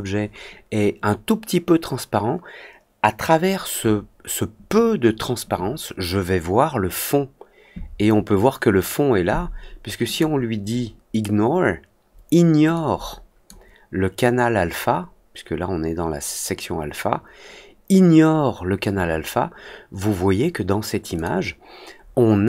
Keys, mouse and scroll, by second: 10.0 click, 12.7 click, 21.1 click.